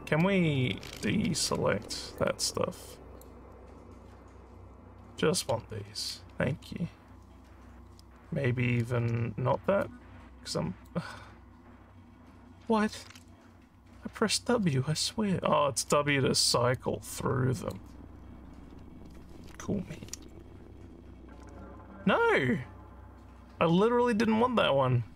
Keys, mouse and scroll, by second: 1.4 w, 2.1-3.2 drag, 9.0 w, 9.8-10.8 drag, 13.0 w, 14.6 w, 15.8 w, 16.8 click.